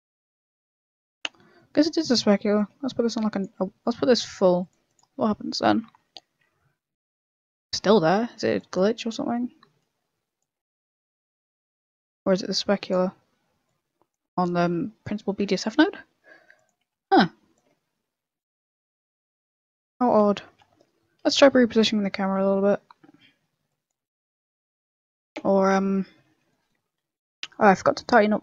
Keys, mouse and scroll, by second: 1.3 middle click, 2.5 click, 5.1 click, 8.5 click, 11.1 click, 14.3 click, 17.5 click, 20.4 KP_0, 21.2 KP_0, 23.6 click, 24.2 click, 25.1 right click, 25.4 Tab, 26.0 KP_0, 26.4 middle click, 26.7 scroll up 3, 27.0 shift+middle click, 27.3 scroll up 3, 27.5 middle click, 28.0 shift+middle click.